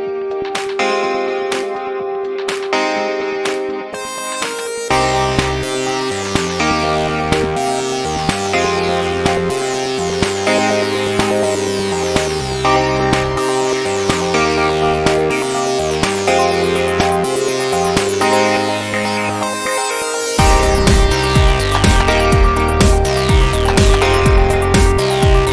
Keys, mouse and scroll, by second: 1.7-3.4 right drag, 2.3-4.9 middle drag, 9.9-13.3 middle drag, 13.3 ctrl+a, 14.7-18.6 middle drag, 16.9 Tab, 18.6 Tab, 18.9-22.8 middle drag, 20.2-22.0 right drag, 21.4 click, 23.0 middle click, 23.4 middle click, 23.6 middle click, 23.8 middle click, 24.0 middle click.